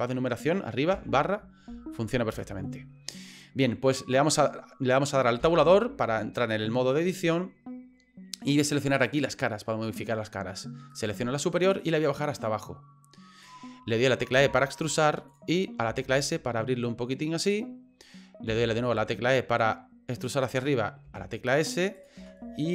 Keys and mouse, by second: 0.9 KP_Divide, 2.3 KP_Divide, 5.4 Tab, 6.5 middle click, 9.0 click, 10.9 right click, 11.8-13.5 drag, 14.4 e, 15.9 s, 18.5 e, 21.0 s, 22.2 e.